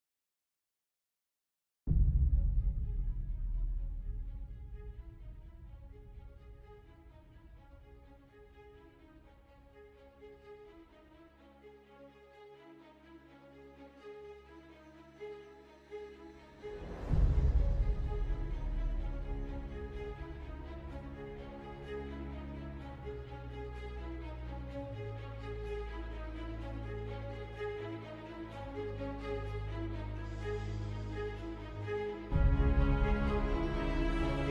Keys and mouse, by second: 0.6 2, 2.6 alt+click, 3.7 f, 4.1 middle click, 6.8 alt+click, 8.0 f, 8.8 middle click, 9.9 3, 12.1 i, 15.8 e, 17.8 i, 20.2 e, 22.6 middle click, 23.6 middle click, 24.3 middle click, 26.4 middle click, 29.3 ctrl+r, 33.1 ctrl+b.